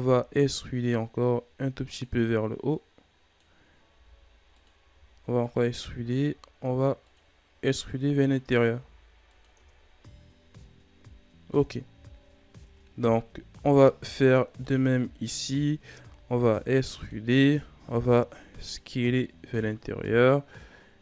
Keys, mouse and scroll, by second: 2.6-3.8 drag, 3.8 s, 4.9 e, 5.8 s, 7.9 click, 8.6 s, 9.5 Tab, 9.7-10.8 scroll down 4, 10.8-11.5 scroll down 2, 11.5-11.9 scroll up 7, 11.9-12.3 shift+scroll down 4, 12.3 scroll up 1, 12.6 Tab, 13.5 alt+right click, 14.6-15.6 drag, 15.6 shift+scroll down 4, 16.0 e, 17.4 s, 20.9 e.